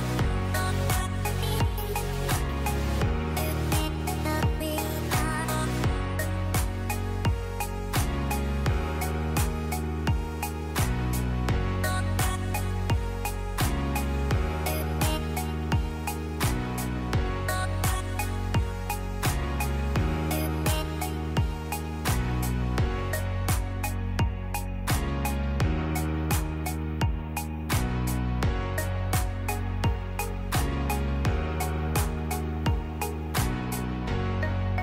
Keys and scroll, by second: 7.2 space, 10.5 space, 16.8 space, 19.8 space, 28.4 space, 32.1 space.